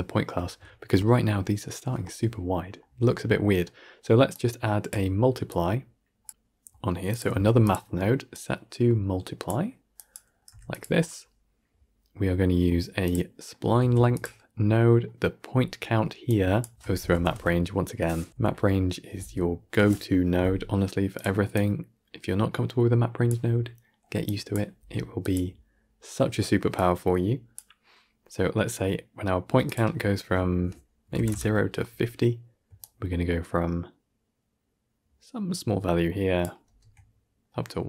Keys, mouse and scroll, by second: 0.3 scroll up 2, 0.5-0.9 shift+middle drag, 4.2 click, 5.4 click, 7.0 click, 7.2 shift+d, 9.3 click, 12.9 click, 13.7 shift+d, 16.0 click, 19.7 BackSpace, 21.4 click, 24.1 click, 27.4 click, 31.2-35.7 drag, 36.5 shift+space.